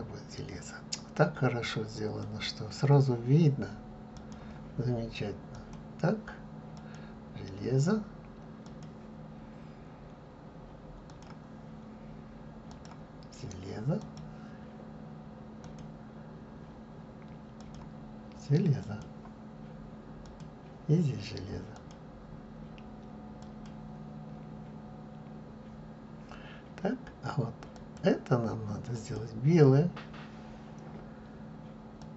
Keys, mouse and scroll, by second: 5.7 click, 6.9-11.4 drag, 14.3-15.9 drag, 19.1-20.5 drag, 23.8-24.5 drag, 24.5-25.3 scroll down 4, 25.3-28.0 scroll up 2, 28.0 click, 29.1 click.